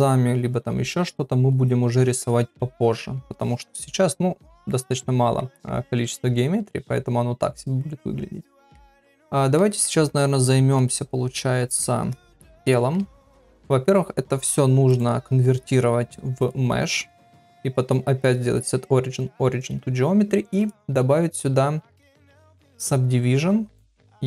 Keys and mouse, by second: 4.9 middle click, 5.6 middle click, 6.7 ctrl+middle click, 8.5 middle click, 9.1 ctrl+middle click, 9.6 middle click, 10.8-11.8 middle drag, 12.6 shift+middle click, 14.9-16.5 right drag, 17.1-18.6 right drag, 23.8 click.